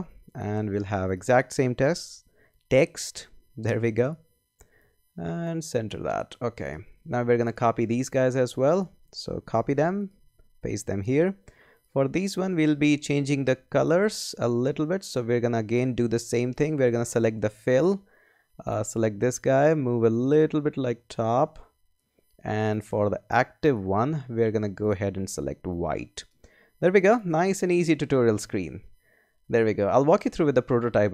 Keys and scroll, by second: 9.5 shift+super+c, 10.1 super+c, 10.4 super+v.